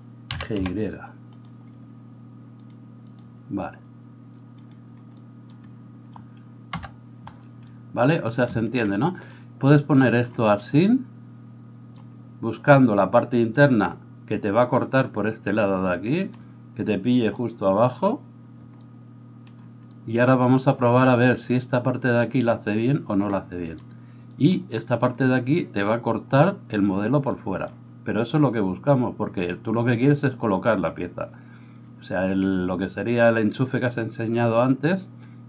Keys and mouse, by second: 0.3 g, 6.7 KP_Divide, 6.7-35.4 right drag, 6.7 KP_8.